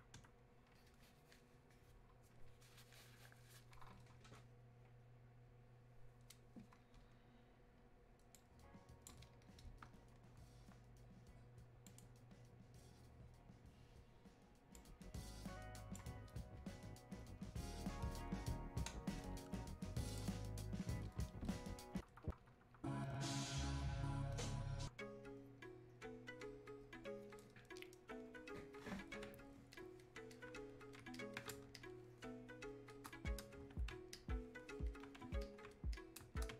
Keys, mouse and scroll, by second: 8.4-10.1 drag, 12.0 click, 14.7-18.3 drag, 20.1 click, 29.6-36.5 drag.